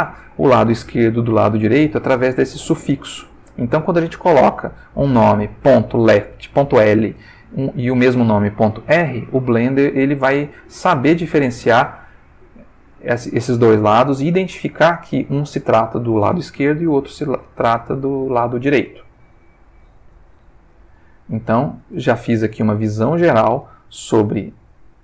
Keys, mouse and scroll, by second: 13.1-13.8 ctrl+middle drag, 14.8 click, 15.4 click, 16.9 click, 17.7-18.7 ctrl+middle drag, 19.4 a, 20.4 alt+g, 20.8 alt+r, 21.3 alt+s, 22.1-23.4 ctrl+alt+middle drag, 24.0 click, 24.8 click.